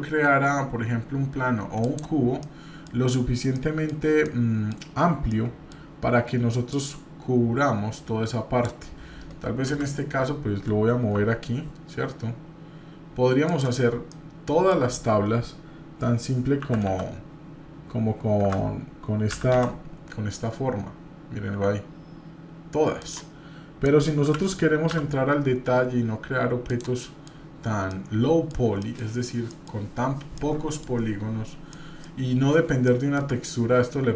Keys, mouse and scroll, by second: 2.4-2.9 middle drag, 3.5 middle click, 3.9 scroll down 1, 4.2-4.7 middle drag, 5.3 middle click, 6.7-8.7 drag, 9.6 KP_7, 11.1 g, 14.1 middle click, 23.8 middle click, 24.2 g, 27.0 middle click, 27.4-27.9 scroll up 1, 27.9 middle click, 28.8 middle click, 29.5 middle click, 30.4 middle click, 31.7-32.1 middle drag, 32.4-32.7 scroll up 2, 32.9-33.2 shift+middle drag.